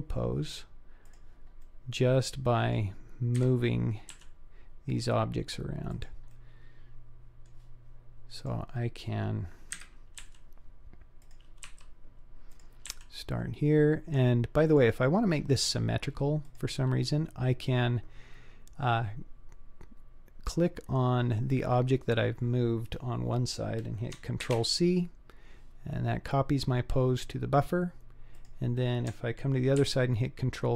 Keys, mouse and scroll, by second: 1.7-2.8 middle drag, 3.4 KP_3, 4.2 g, 6.3-7.5 middle drag, 7.5 click, 8.4 click, 9.8 KP_1, 10.2 g, 11.8 r, 13.0 g, 16.4 click, 20.7-21.3 scroll up 4, 21.3-22.5 scroll down 3, 24.4 ctrl+c, 28.3 click, 29.9 ctrl+v.